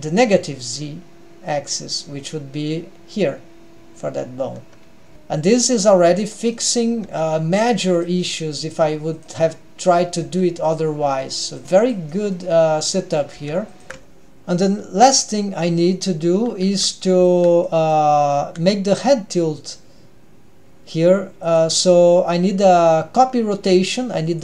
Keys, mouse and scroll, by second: 4.9-6.1 scroll down 3, 5.1 middle click, 5.1 g, 6.1-6.9 scroll down 2, 6.6-6.9 middle drag, 7.2 g, 8.3-8.7 middle drag, 8.9 g, 9.4-10.1 middle drag, 10.3 g, 11.2 g, 11.6-12.1 scroll up 2, 12.1-12.6 middle drag, 12.7 scroll up 1, 12.9-13.4 middle drag, 13.4 g, 13.9 ctrl+alt+shift+super+r, 15.1 middle click, 15.9 middle click, 17.1 g, 17.6-18.1 middle drag, 18.4 r, 24.3 click.